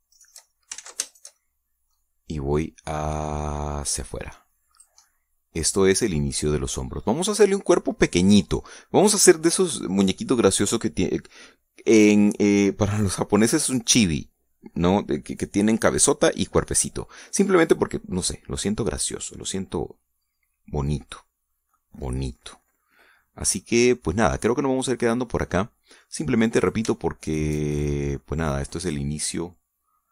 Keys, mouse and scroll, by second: 0.0 right click, 0.5 shift+right click, 1.1 shift+right click, 1.7 ctrl+shift+z, 2.1 ctrl+shift+right click, 2.3 ctrl+shift+middle click, 3.5-6.0 drag, 6.0-8.1 middle drag, 8.1 scroll up 2, 8.2 scroll down 2, 9.2-9.5 scroll down 2, 17.9 scroll down 2, 18.4 scroll up 2, 19.2-22.1 middle drag, 22.3 scroll down 1, 22.7 middle click, 24.5-27.2 middle drag, 27.5 shift+right click, 28.3 shift+right click, 28.5 shift+middle click, 29.5 click.